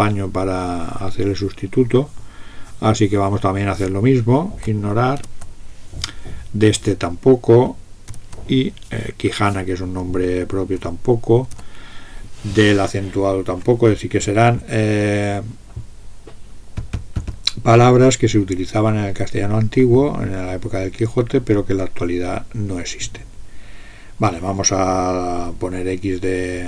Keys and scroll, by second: 5.2 typing, 7.9-8.8 typing, 11.4 typing.